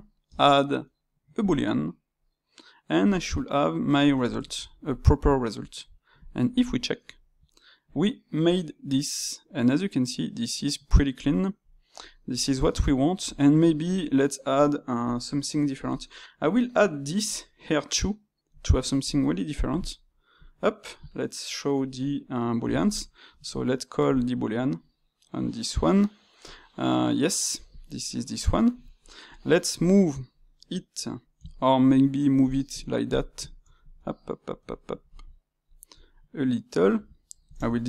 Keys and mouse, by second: 0.2 space, 3.8-6.2 middle drag, 6.2 click, 6.8-10.7 middle drag, 11.2-19.0 shift+middle drag, 19.0 drag, 19.2-20.4 middle drag, 20.4 click, 23.2 space, 28.0-29.2 middle drag, 29.2-29.8 drag, 31.3 Tab, 32.4 click, 33.4-35.9 middle drag, 35.9 g, 37.5 shift+Tab.